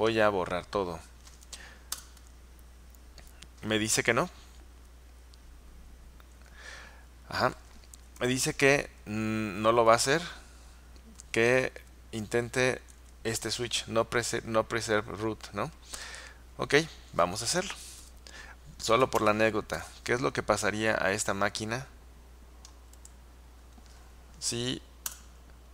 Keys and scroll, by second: 2.0 Return, 9.4 Left, 9.6 Left, 9.8 Left, 10.0 Left, 12.5 Right, 12.7 Right, 12.9 Right, 13.1 Right, 17.9 Left, 18.1 Left, 19.0 space, 19.3 space, 19.8 Left, 25.2 Return.